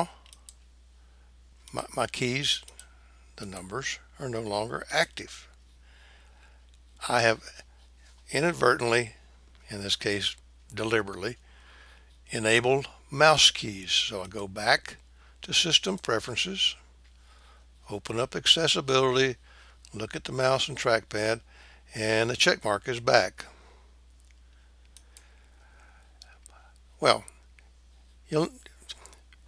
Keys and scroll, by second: 3.4 KP_1.